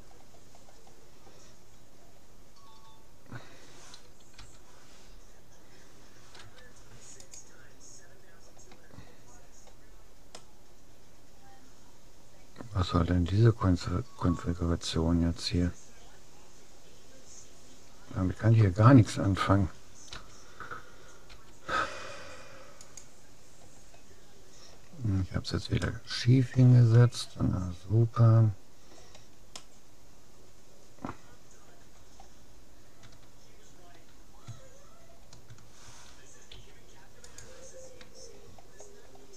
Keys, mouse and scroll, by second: 1.6-2.4 scroll down 1, 2.4-3.8 middle drag, 4.4 u, 6.4 u, 9.4-12.0 middle drag, 20.2 u, 21.4 u, 25.0-28.0 middle drag, 29.6-31.2 middle drag, 32.0-34.0 middle drag, 34.8-37.0 middle drag, 36.6 u, 38.6-39.3 middle drag.